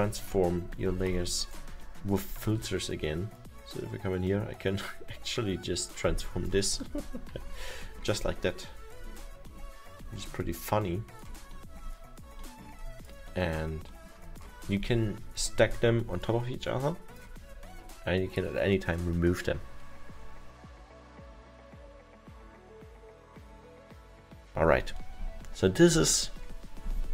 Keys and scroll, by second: 6.9 ctrl+z, 10.2 alt+7.